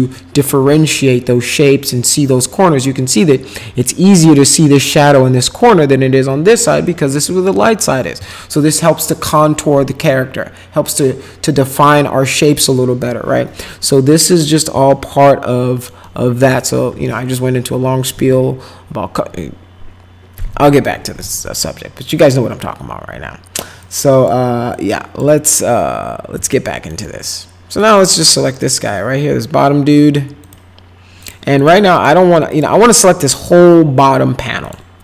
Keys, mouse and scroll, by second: 14.9 alt+middle click, 16.0 alt+middle click, 23.8 click, 24.7 click, 26.5 alt+middle click, 27.0 middle click, 27.9 click, 28.5 click, 30.4 click, 31.2 click, 31.6 click, 31.9 click, 32.5 click, 33.7 alt+middle click, 34.6 click.